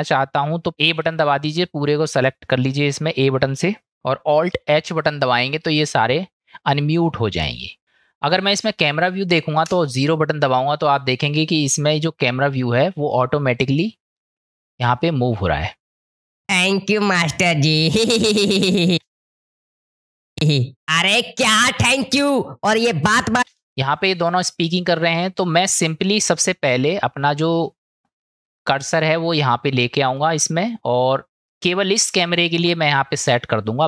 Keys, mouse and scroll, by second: 1.1 a, 4.9 alt+h, 9.7 KP_0, 16.1 click, 16.5 space, 19.0 space, 20.4 space, 26.2-26.9 drag, 27.6-29.1 drag, 30.3 middle click, 31.5 middle click.